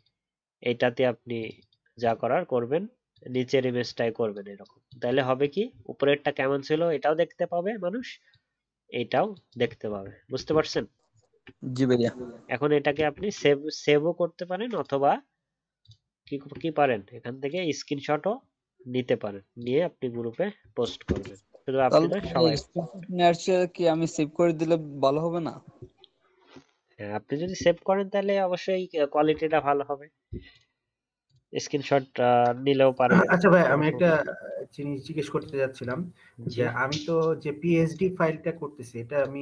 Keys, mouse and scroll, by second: 5.7-6.9 alt+scroll down 1, 10.8 alt+scroll down 5, 11.0-11.4 alt+scroll up 1, 11.4-12.0 alt+scroll down 1, 12.0 alt+scroll down 1, 12.0 alt+scroll up 1, 13.1 ctrl+shift+s, 16.3-16.6 alt+scroll up 1, 20.2-21.0 alt+scroll up 2, 21.0 ctrl+0, 22.6-23.4 alt+scroll down 2.